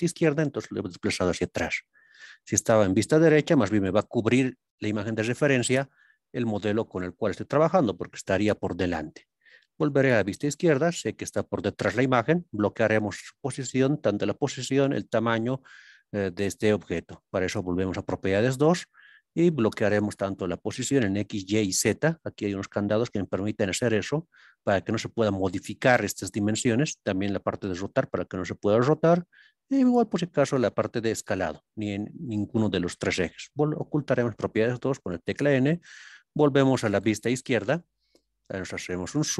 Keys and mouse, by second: 2.9 KP_3, 4.1 middle click, 6.4-7.5 drag, 9.7 ctrl+KP_3, 10.9 middle click, 17.5 n, 35.8 KP_3, 37.2 ctrl+KP_3, 38.6 click.